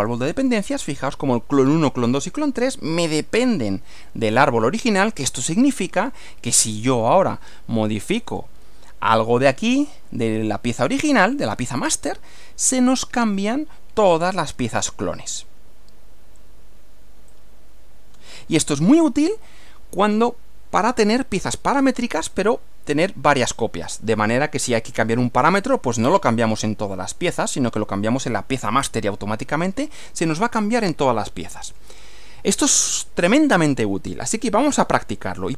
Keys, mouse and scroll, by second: 0.0 click, 5.3 click, 6.7 click, 8.1 click, 9.6-11.1 drag, 14.3-15.6 drag, 17.3-18.3 drag, 22.3-24.3 middle drag, 31.7 click.